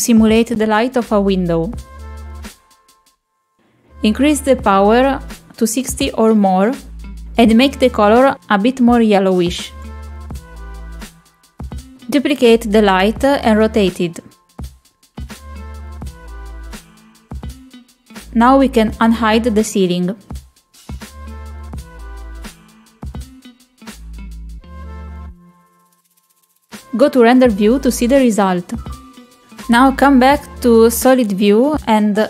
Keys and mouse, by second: 0.0 click, 0.9 g, 3.7 r, 4.4 g, 6.7 click, 13.5 shift+d, 15.9 r, 16.8 g, 19.5 middle click, 21.7 click, 24.1-26.4 drag.